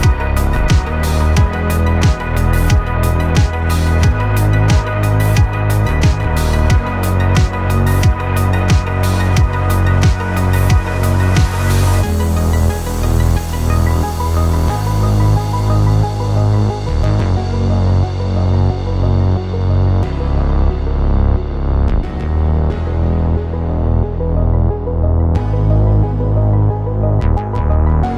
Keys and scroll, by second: 21.1 1, 21.6 0.